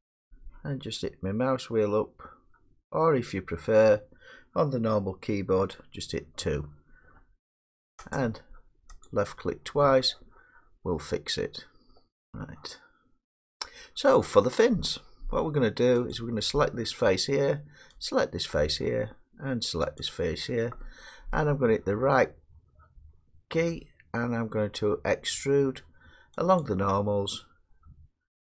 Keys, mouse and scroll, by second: 1.4-2.5 scroll, 2.8-3.1 scroll, 3.7 scroll, 5.6 2, 8.2 click, 9.2-10.4 drag, 10.5 click, 10.7-12.0 drag, 12.2 middle click, 12.4-14.3 drag, 14.9 middle click, 16.8 click, 18.1 shift+click, 21.4 middle click, 23.7 right click, 26.6 click.